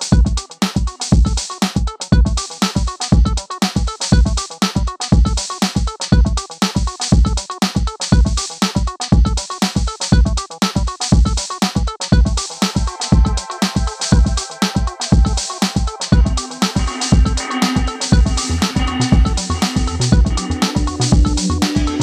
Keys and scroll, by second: 0.0-0.7 typing, 4.3 ctrl+z, 8.7 Return, 11.3-12.2 typing, 14.5 Delete.